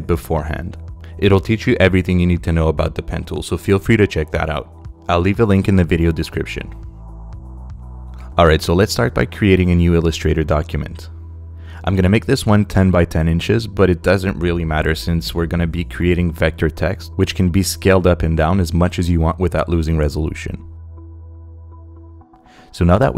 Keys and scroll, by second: 8.9 super+n, 13.2-14.6 typing, 20.4 Return.